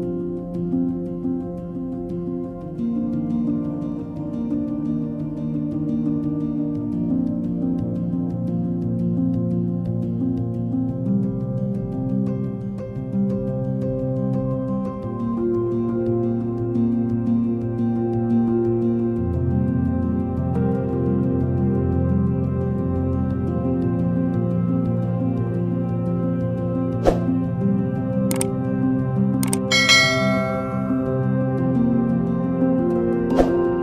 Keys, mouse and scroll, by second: 10.6 alt+click, 19.0 ctrl+d, 19.5 ctrl+d, 20.1 ctrl+d, 20.4 ctrl+d, 20.7 ctrl+d, 28.9 ctrl+c, 30.9 typing.